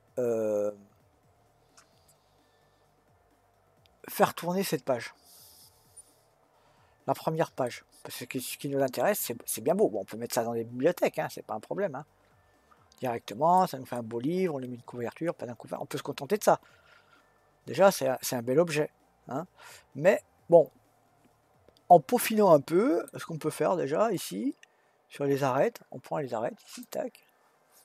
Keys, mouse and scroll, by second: 7.7-10.7 middle drag, 13.9-17.0 middle drag, 23.8-24.9 scroll up 1, 24.9-26.8 scroll up 1, 26.8 click.